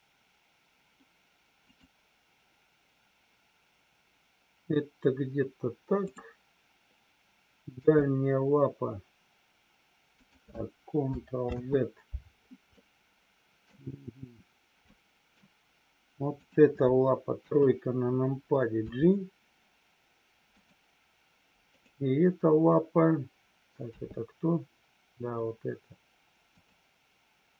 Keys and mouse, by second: 6.0-6.6 drag, 10.2 click, 11.6 ctrl+z, 12.6-13.6 middle drag, 14.8-15.4 middle drag, 16.5 click, 17.4 KP_3, 18.9 g, 21.6 click.